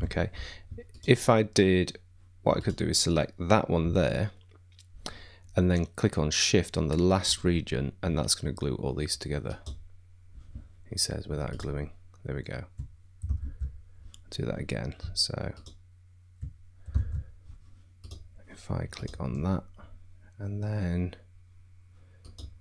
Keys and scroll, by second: 13.4 shift+super+z, 17.0 shift+super+z.